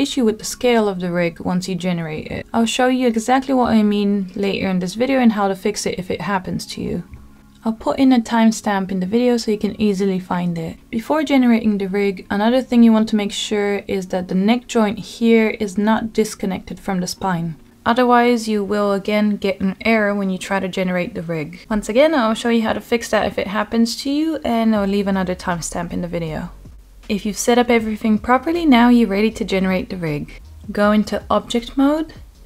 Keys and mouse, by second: 5.2-6.1 middle drag, 6.2 Tab, 7.3-8.4 middle drag, 9.3 shift+middle click, 9.5 shift+click, 10.1 shift+click, 10.3 shift+middle click, 12.8 g, 14.2 click, 14.6-16.3 middle drag, 17.4 ctrl+z, 18.0 middle click, 20.8 middle click, 21.8-22.2 shift+middle drag, 22.8 middle click, 23.7 alt+click, 24.2 middle click, 25.2 shift+click, 26.7 Tab.